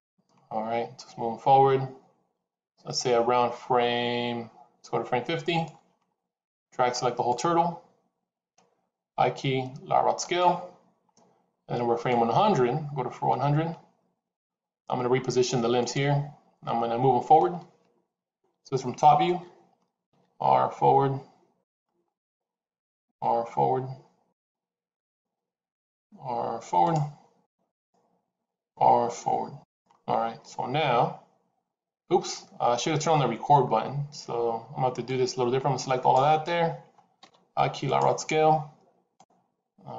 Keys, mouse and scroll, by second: 6.4 click, 9.1 i, 12.2 click, 14.8 scroll up 2, 15.7 click, 22.1 click, 23.0 r, 24.9 click, 25.4 r, 27.6 click, 28.2 r, 30.3-30.6 scroll down 2, 34.9 click, 37.1 l.